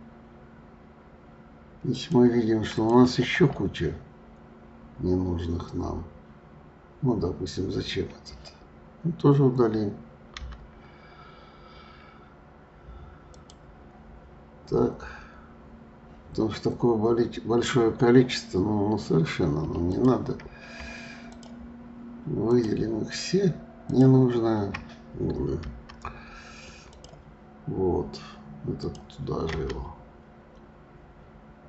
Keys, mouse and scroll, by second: 2.7 click, 4.7 scroll down 1, 5.7-8.7 scroll up 1, 10.4 Delete, 14.1 scroll down 2, 15.0-15.7 scroll down 8, 16.6-17.9 scroll up 11, 18.7-19.0 scroll up 2, 19.8 click, 21.3 shift+click, 22.5 shift+click, 23.9 shift+click, 25.7 Delete, 28.7 click, 29.5 Delete.